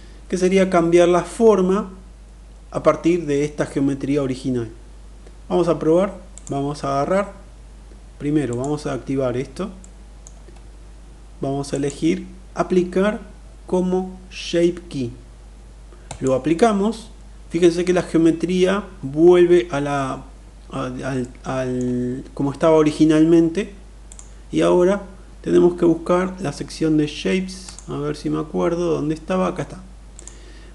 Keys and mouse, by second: 5.9-7.7 drag, 8.1 click, 9.4-9.9 middle drag, 11.5-16.0 drag, 20.8-21.5 middle drag, 23.6 click, 29.8 click.